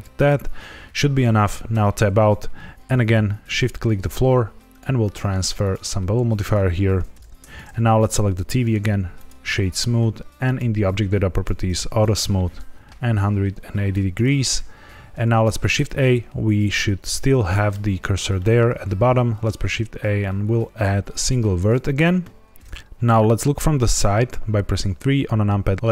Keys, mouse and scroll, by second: 0.1 click, 1.7 Tab, 3.5 shift+click, 4.6 click, 5.5 click, 7.4 click, 7.5 ctrl+z, 7.5 right click, 7.9 click, 8.6 right click, 10.4 click, 11.3 click, 11.9 shift+click, 15.3 shift+a, 17.4 middle click, 18.3 middle click, 19.0 shift+a, 23.9 KP_3, 24.8-25.7 scroll up 2, 25.7 scroll down 2, 25.8-25.9 scroll up 2.